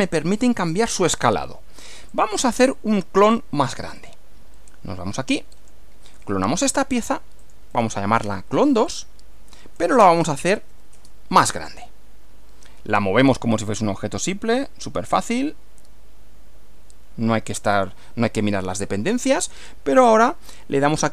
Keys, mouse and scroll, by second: 2.1 click, 4.0 click, 5.5 click, 7.4 click, 7.7 right click, 8.9 click, 9.7-11.2 typing, 13.3 click, 15.1 click, 17.7 click, 18.4-19.5 middle drag.